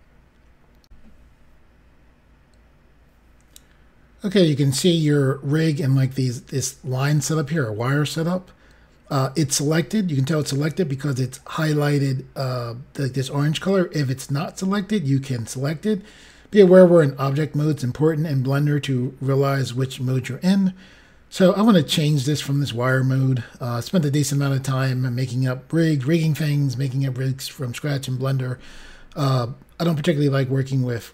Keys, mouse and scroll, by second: 0.8 Pause, 1.3 Insert.